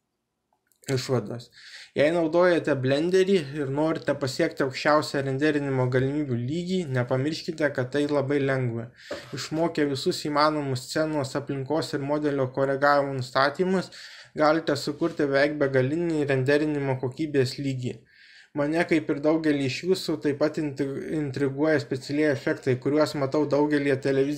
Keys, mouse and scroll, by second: 10.8 click, 12.8-15.0 drag, 15.0 middle click, 15.6 middle click, 17.6 middle click, 20.0 middle click, 21.5 shift+middle click.